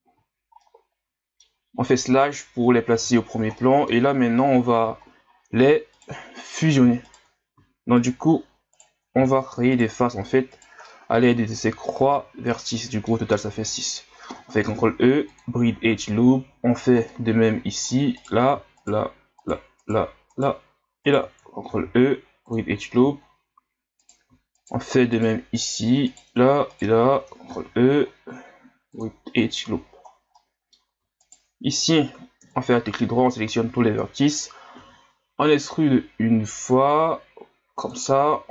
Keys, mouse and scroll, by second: 0.6-2.2 middle drag, 2.2 KP_Divide, 3.2-3.6 scroll down 5, 3.6-4.1 middle drag, 4.1 scroll up 4, 5.1 ctrl+scroll down 1, 5.3-6.0 scroll up 1, 6.0 right click, 6.2 scroll up 1, 7.0 shift+right click, 8.0 shift+right click, 8.7 shift+right click, 9.7 shift+right click, 10.5 shift+right click, 10.8-13.9 middle drag, 14.6 ctrl+e, 15.9-16.3 scroll down 1, 16.3-17.1 scroll up 6, 17.1-18.2 middle drag, 18.2-19.5 right drag, 19.8 shift+right click, 20.3 shift+right click, 21.0 shift+right click, 21.6 ctrl+e, 22.8 scroll down 2, 23.2 ctrl+scroll up 4, 24.0-24.6 right drag, 25.1 shift+right click, 25.6-26.2 shift+right drag, 26.7 shift+right click, 27.5 ctrl+e, 29.8-30.2 scroll down 3, 30.4 middle click, 31.2 alt+right click, 32.4 KP_7, 33.4 scroll down 4, 34.8 e.